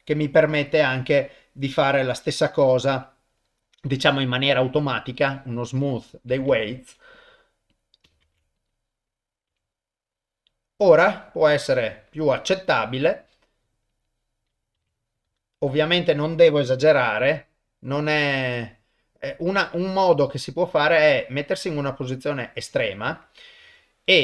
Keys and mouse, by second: 1.4 click, 6.5 ctrl+Tab, 7.7 click, 8.2 ctrl+Tab, 8.6 click, 9.5 r, 13.9 click, 14.8 r, 15.9 click, 16.9 r, 23.6 ctrl+Tab.